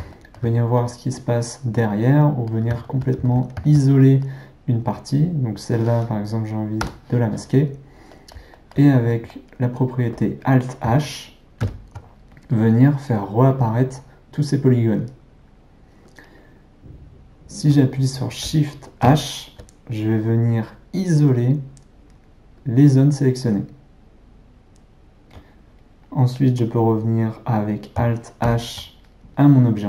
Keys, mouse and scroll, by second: 0.1-5.2 ctrl+middle drag, 5.2 click, 6.8 h, 8.1-11.6 middle drag, 11.6 alt+h, 19.0 shift+h, 28.5 alt+h.